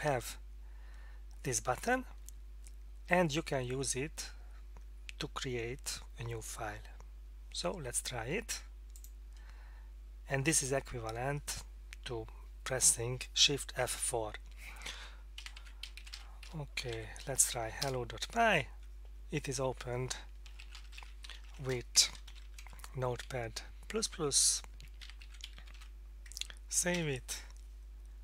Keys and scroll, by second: 15.4-16.9 typing, 17.8 Return, 20.2-22.8 typing, 22.0 Left, 24.8-25.7 typing, 26.9 ctrl+s.